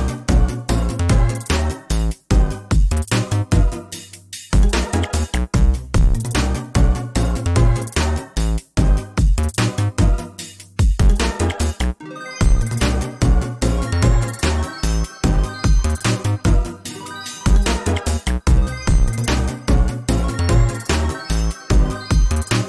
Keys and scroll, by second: 0.3 ctrl+t, 1.3 ctrl+space, 3.9 ctrl+z, 7.2 ctrl+space, 20.6 ctrl+s.